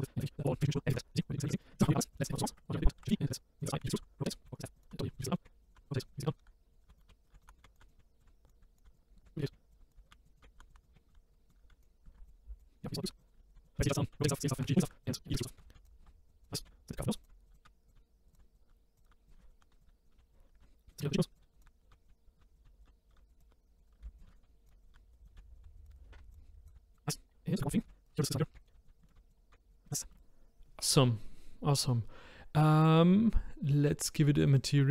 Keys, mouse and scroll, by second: 0.4 scroll down 1, 0.5 shift+middle click, 0.8 click, 0.9 click, 1.6 click, 1.6 scroll up 2, 1.7 shift+middle click, 2.6 click, 2.9-11.7 typing, 4.8 click, 5.7 click, 6.8 click, 10.4 click, 11.4 scroll up 1, 11.5 click, 12.2 click, 12.6 click, 12.8 scroll down 2, 12.9 scroll up 2, 13.1-25.6 typing, 13.2 click, 14.9 ctrl+z, 15.0 click, 15.6 ctrl+z, 16.0 ctrl+z, 16.4 click, 17.2 click, 17.5 click, 18.3 click, 19.0 click, 19.4 ctrl+z, 19.8 click, 21.4 click, 21.6 Left, 23.4 click, 24.3 ctrl+z, 24.3 click, 25.2 click, 25.8 click, 26.1 scroll down 2, 26.3 click, 26.5 scroll up 6, 26.6 click, 26.7 g, 27.5 click, 27.6 shift+middle click, 27.9-29.5 typing, 28.1-28.5 scroll up 3, 29.0 shift+middle click, 29.1 click, 29.4 scroll down 5, 29.9 shift+middle click, 30.0 click, 30.1 shift+middle click, 34.5 click.